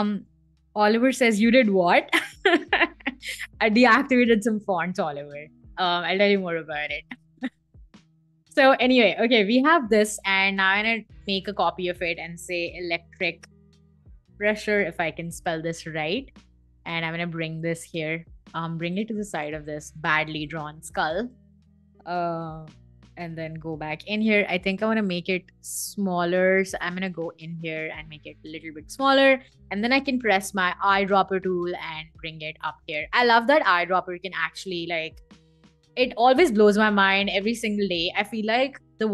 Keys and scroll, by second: 11.7-15.1 typing, 21.3-23.5 typing, 29.8 i, 32.2 v.